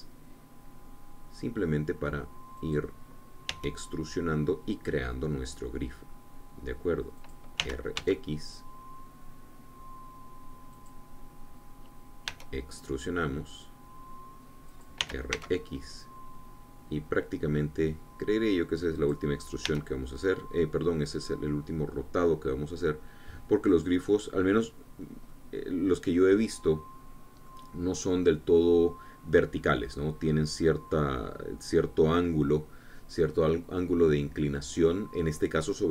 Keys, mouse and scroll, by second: 0.2 x, 3.3 click, 4.2 e, 7.9 click, 8.3 r, 8.7 x, 11.5-13.0 drag, 13.0 e, 15.4 click, 15.8 r, 16.1 x, 19.7 click, 20.4 e, 24.4-25.7 drag, 25.7 scroll down 1, 26.1-28.4 drag, 33.6-33.9 scroll down 1, 33.9-35.9 drag.